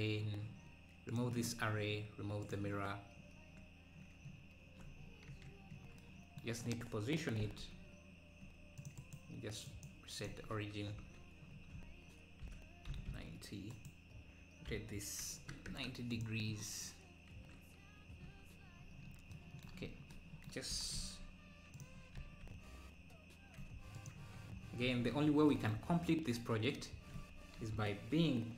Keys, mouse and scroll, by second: 1.2-4.3 drag, 5.0 scroll down 4, 5.3 KP_7, 5.7-6.0 scroll down 5, 7.4 g, 10.2 right click, 11.0 KP_Decimal, 11.6 scroll down 4, 12.5 r, 14.7 r, 18.3 KP_1, 19.0-19.3 scroll down 6, 20.8 g, 24.2 KP_Decimal, 24.6-24.9 scroll down 2, 27.6 KP_1.